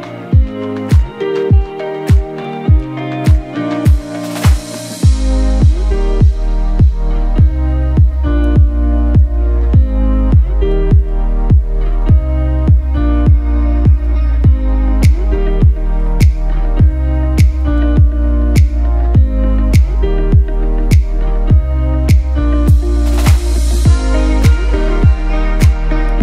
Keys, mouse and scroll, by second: 0.0-1.1 typing, 6.7 scroll down 1, 6.7 click, 7.8 right click, 8.5-18.3 drag, 19.6-24.3 alt+shift+drag, 24.3 Right, 25.0 shift+Right.